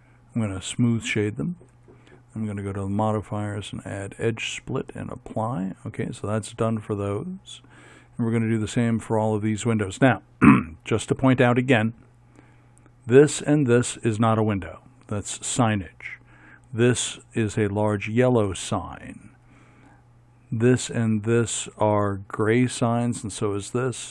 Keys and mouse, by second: 0.5 middle click, 0.8-2.4 drag, 2.9-4.2 drag, 4.2 middle click, 5.3-6.6 drag, 6.6-8.3 middle drag.